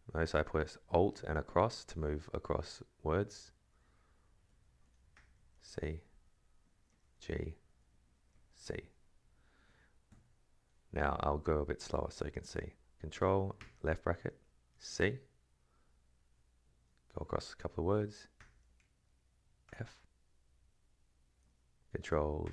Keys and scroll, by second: 1.6 alt+Left, 2.0 alt+Right, 3.1 alt+Left, 3.8 alt+Right, 4.5 alt+Left, 5.1 ctrl+[, 5.5 shift+c, 5.9 alt+Right, 6.7 ctrl+[, 7.0 shift+g, 7.4 alt+Right, 7.9 space, 8.1 ctrl+[, 8.6 shift+c, 9.7 Right, 13.6 ctrl+[, 14.7 shift+c, 15.9 alt+Right, 18.3 ctrl+[, 19.6 shift+f, 20.5 alt+Right, 22.4 ctrl+[.